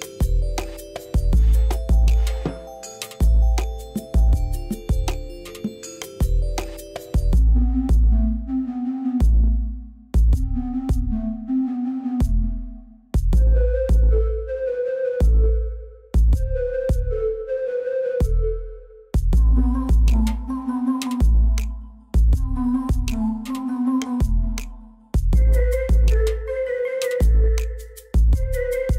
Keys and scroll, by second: 6.6 alt+a, 14.3 0, 14.6 Tab, 15.4 1, 15.7 Return, 18.5 6, 19.2 Return, 23.1 g, 23.4 y.